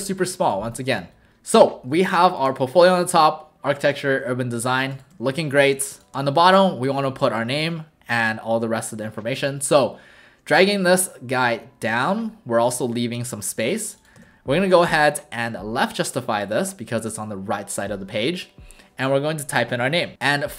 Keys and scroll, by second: 1.3 alt+w, 2.0 alt+space, 5.1 w, 5.7 space, 15.7 ctrl+a.